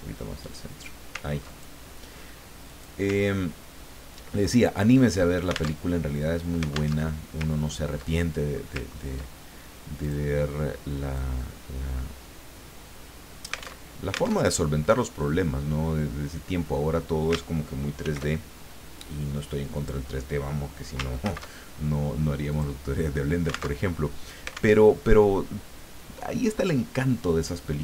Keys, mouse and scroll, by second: 1.5 ctrl+click, 2.7 click, 3.4 ctrl+scroll down 2, 4.5 ctrl+middle click, 5.8 alt+Tab, 6.9 alt+Tab, 7.5-7.8 ctrl+scroll up 2, 8.2 ctrl+middle click, 8.9 ctrl+scroll up 2, 10.0 click, 11.1-14.0 drag, 14.0 alt+Tab, 18.0 ctrl+shift+f, 19.7 click, 21.2 ctrl+shift+c, 22.5 click, 23.8 alt+Tab, 24.8 alt+Tab.